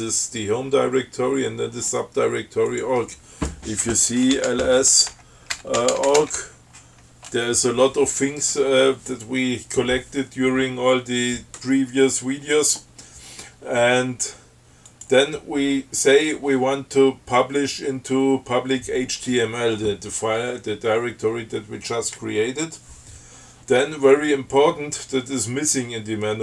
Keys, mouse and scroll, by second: 2.9 click, 4.3-6.8 typing, 15.1 click, 16.5 click.